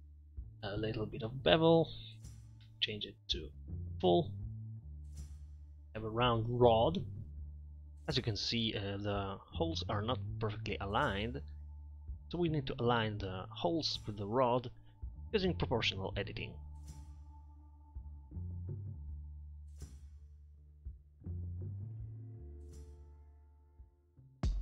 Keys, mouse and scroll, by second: 5.5 middle drag, 10.2 right click, 15.2 ctrl+z, 18.1 middle click, 19.7 Tab, 19.9 Tab, 21.7 right click.